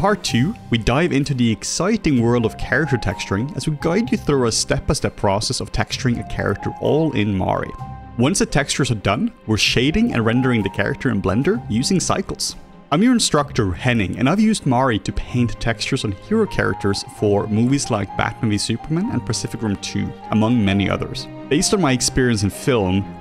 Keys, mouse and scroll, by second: 0.0-2.9 typing, 1.5 middle click, 4.7 r, 5.2 r, 5.6 r, 6.5 r, 6.9-8.0 drag, 9.1-10.5 typing, 9.7 click, 10.5 ctrl+shift+c, 10.6 alt+middle click, 10.6 alt+click, 10.9 alt+click, 11.1 middle click, 12.3 r, 12.5 ctrl+shift+c, 12.5 middle click, 12.6 click, 12.8 ctrl+shift+c, 12.8 r, 12.9 ctrl+shift+c, 13.3 click, 13.5 r, 13.7 click, 14.6-15.9 drag, 14.6 r, 16.0-22.5 drag, 16.0 r, 16.3 r, 16.6 ctrl+middle click, 16.7 ctrl+z, 16.7 r, 17.8 r, 21.4 ctrl+z, 21.4-23.2 typing, 23.0 click.